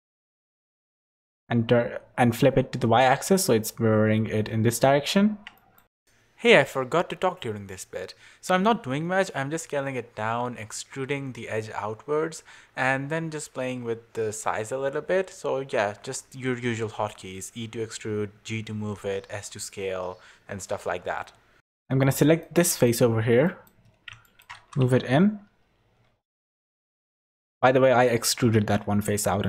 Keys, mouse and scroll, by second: 0.0 click, 0.5 click, 4.8 Tab, 5.6 middle click, 6.1 middle click, 7.0 a, 7.3 s, 9.6 Tab, 9.9 Tab, 10.1 3, 10.3 click, 10.5 middle click, 11.0 shift+middle click, 11.4 e, 13.0 ctrl+KP_Add, 13.7 middle click, 13.9 s, 17.7 click, 18.0 middle click, 18.3 e, 19.9 ctrl+z, 20.3 ctrl+KP_Subtract, 21.3 middle click, 21.6-22.1 scroll up 3, 22.1 middle click, 22.7 middle click, 23.4 middle click, 23.8 scroll up 1, 24.2 shift+middle click, 24.6 g, 29.2 middle click.